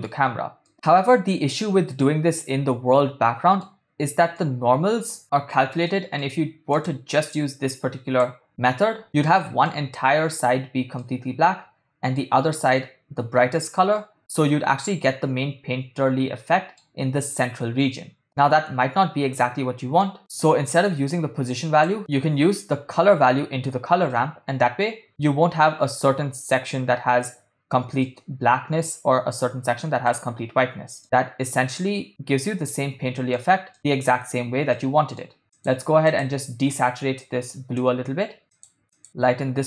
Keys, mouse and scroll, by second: 0.7-3.8 middle drag, 4.5 middle click, 5.9 middle click, 6.7 click, 7.4-8.4 drag, 9.0-9.9 middle drag, 11.2-12.3 middle drag, 14.0-17.0 middle drag, 18.2-20.4 middle drag, 21.1-22.0 drag, 24.2-26.8 middle drag, 28.1-30.3 middle drag, 31.0-32.1 ctrl+middle drag, 32.7-34.2 middle drag, 34.9 ctrl+middle click, 35.6-36.0 drag, 36.2 click, 38.5 click.